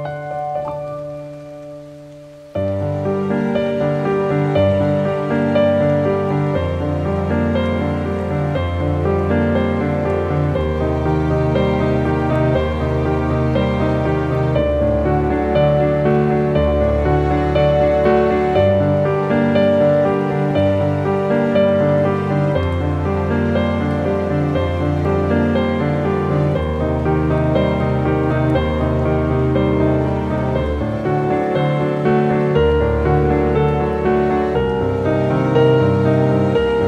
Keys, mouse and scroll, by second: 0.3 scroll up 1, 3.9 click, 7.0 click, 15.7-17.4 typing, 20.4 click, 21.7 typing, 22.3-25.4 drag, 23.5 typing, 27.1 scroll down 1, 29.5 right click, 31.8 click, 35.3 click, 35.3 typing.